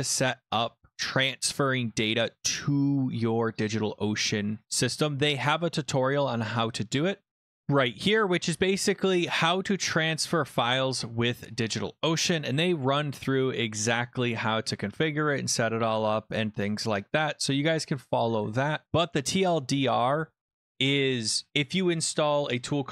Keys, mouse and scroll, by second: 3.7 click, 7.6 Return, 7.6-11.1 drag, 7.6 typing, 12.1 middle click, 12.1-12.7 scroll, 13.2-15.0 scroll, 15.1-16.9 scroll down 27, 17.1-18.8 scroll, 22.2 click.